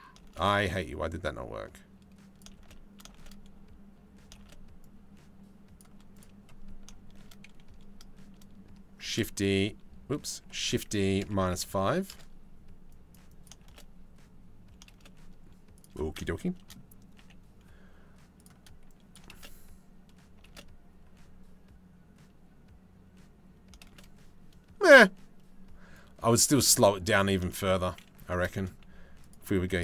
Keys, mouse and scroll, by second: 0.4-2.0 drag, 2.2 shift+space, 2.8 shift+space, 4.0 shift+space, 4.4-5.4 drag, 5.7 click, 8.6 shift+d, 10.2 shift+d, 12.5 click, 12.9 click, 13.2 shift+space, 14.5 shift+space, 15.4 click, 16.0 shift+click, 16.8 g, 18.5 click, 18.7 middle click, 18.9 shift+space, 20.1 shift+space, 23.4 shift+space, 25.6 click, 27.1 shift+middle click, 27.8 a, 28.2 shift+middle click, 28.8 click, 29.7 s.